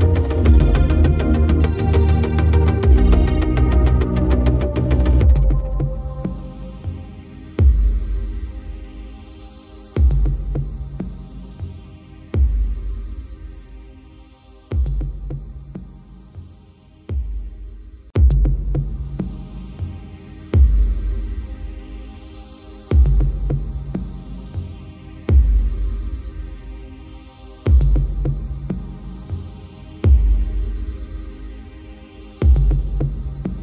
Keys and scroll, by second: 13.2 ctrl+=, 23.5 shift+F5.